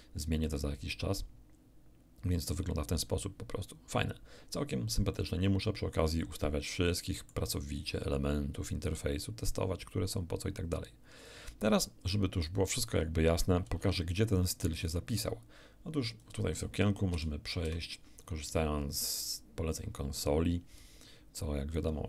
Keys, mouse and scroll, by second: 5.1-6.1 middle drag, 13.8 alt+F1, 14.9-16.4 alt+drag, 17.1 ctrl+alt+shift+=, 17.6 ctrl+alt+shift+=, 19.1 alt+click, 21.4 alt+right click.